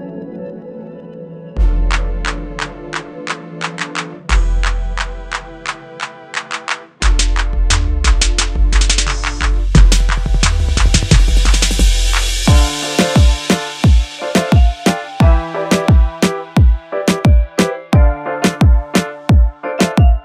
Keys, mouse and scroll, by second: 0.2-1.0 scroll down 1, 3.2 click, 4.3 double click, 8.0 click, 8.6 scroll up 1, 10.0 shift+click, 11.1-11.5 scroll down 1, 15.0 click, 16.8 right click, 17.6 double click, 19.2 ctrl+g.